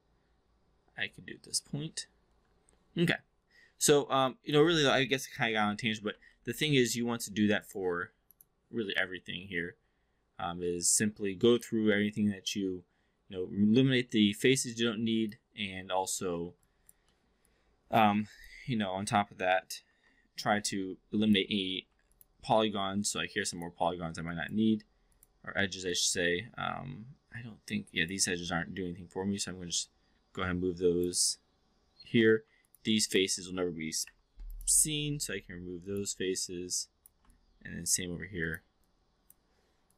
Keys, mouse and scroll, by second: 4.2-4.6 alt+drag, 5.2 shift+i, 6.3 alt+middle drag, 6.6 alt+drag, 7.1 4, 7.5 click, 9.0-15.3 alt+drag, 16.6-16.9 alt+drag, 17.1 alt+middle drag, 17.4-18.0 alt+drag, 18.3 click, 19.8 shift+i, 20.6-21.4 alt+drag, 21.7 2, 22.5-23.8 alt+drag, 24.2-24.5 alt+drag, 25.0 click, 25.9-28.1 alt+drag, 29.7-31.0 drag, 32.3 3, 33.0 shift+click, 34.0 Delete, 35.2 1, 35.9 click, 36.4 click, 37.3 click, 38.3 click, 38.9 click, 39.8 click.